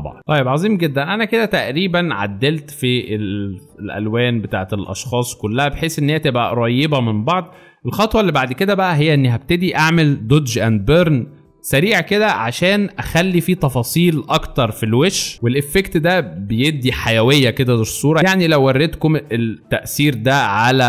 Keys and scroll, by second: 0.5 alt+shift+space, 15.3 alt+space, 16.3 alt+space.